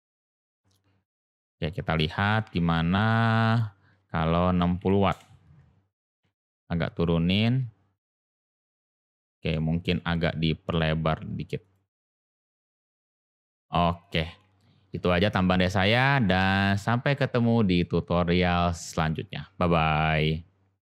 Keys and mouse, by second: 1.9 click, 3.4-5.6 drag, 6.1 g, 9.5-9.9 middle drag, 13.5 click, 14.0 click, 16.1 click.